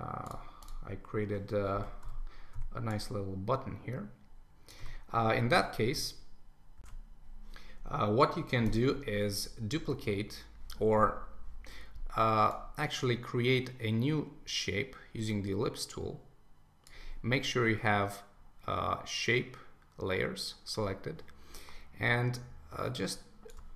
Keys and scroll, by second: 1.7 super+s, 6.8 shift+super+1.